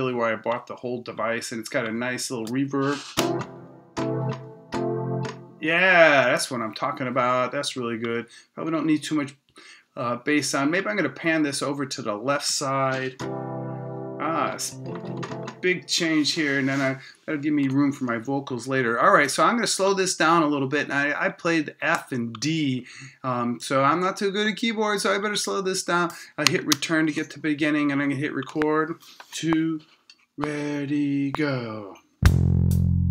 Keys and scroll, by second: 26.7 Return.